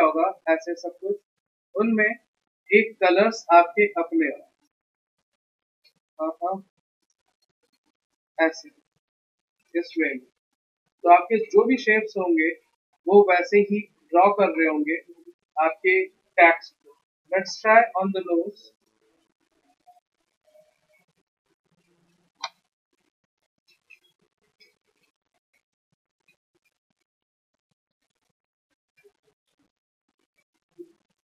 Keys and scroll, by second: 1.9 ctrl+z, 2.3 s, 4.0 v, 5.1 ctrl+x, 5.7 ctrl+z, 7.8 ctrl+x, 12.4 ctrl+z, 17.7 p, 26.8 x.